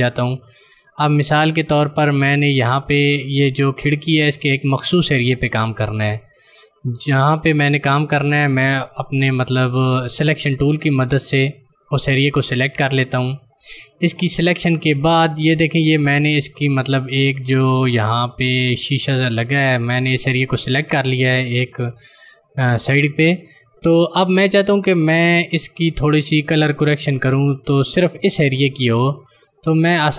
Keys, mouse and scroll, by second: 7.2 click, 10.9 click.